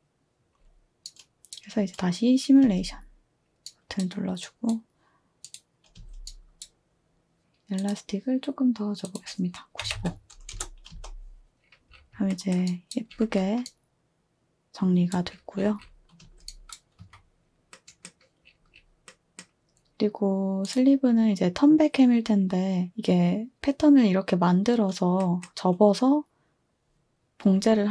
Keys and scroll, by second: 2.6 space, 5.9 space, 9.6-11.0 typing, 13.9-14.3 typing, 16.2-17.0 typing.